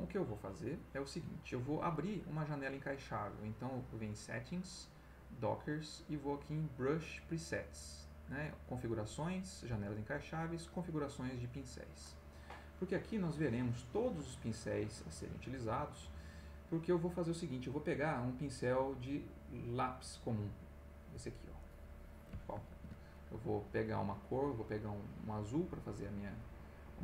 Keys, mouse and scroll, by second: 3.0 click, 11.5 click, 19.0-20.0 drag, 20.5 click, 21.6 click, 22.7 ctrl+z, 24.9 click, 26.4 click.